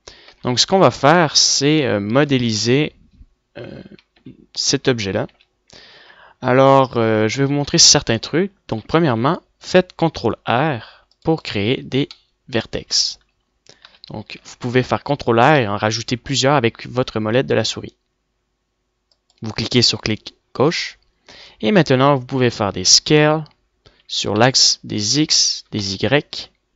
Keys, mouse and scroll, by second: 0.2-1.7 middle drag, 5.7 Tab, 6.7 a, 8.6-10.2 middle drag, 10.5 ctrl+r, 13.0 click, 14.6 middle click, 15.2 ctrl+z, 15.7 ctrl+r, 23.7 s.